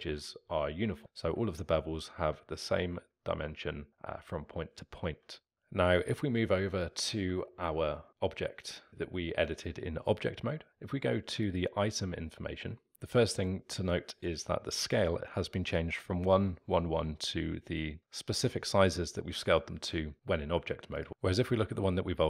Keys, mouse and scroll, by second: 6.8 click, 7.5-21.0 alt+middle drag, 21.0 click, 21.1 click.